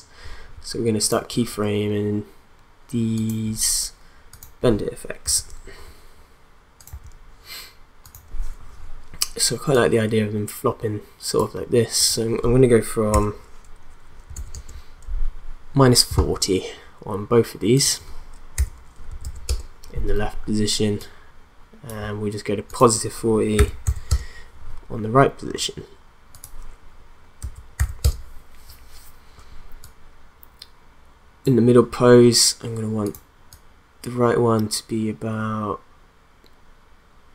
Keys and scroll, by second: 5.2 u, 14.3 0, 14.5 Return, 18.6-19.7 typing, 23.6 4, 23.8 0, 24.1 Return, 27.4 4, 27.8 0, 28.0 Return.